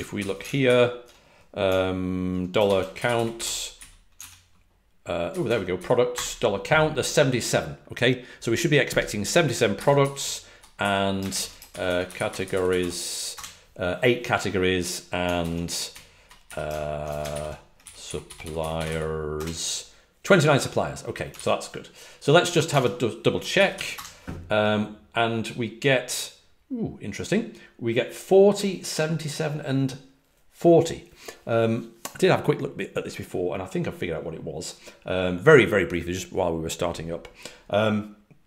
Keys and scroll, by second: 0.1 super+n, 0.6 ctrl+alt+super+Left, 2.8-3.8 typing, 6.0 Up, 6.0 Return, 9.7 super+l, 11.2 alt+shift+Left, 11.8-13.7 typing, 15.3 super+l, 16.1 Right, 16.1 Left, 17.2 alt+shift+Left, 18.1-19.3 typing, 21.3 super+w, 22.6 super+Tab, 23.8 typing.